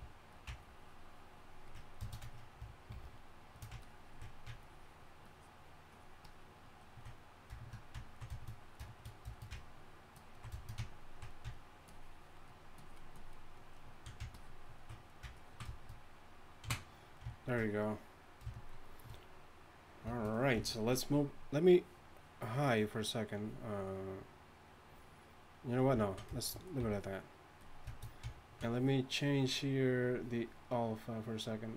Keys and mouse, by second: 2.9 shift+f, 26.8 f, 27.6 f.